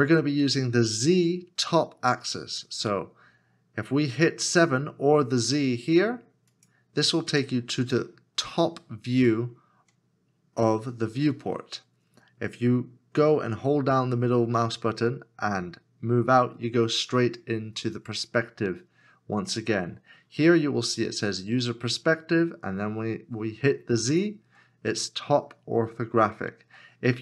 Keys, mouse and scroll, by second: 15.1 middle click.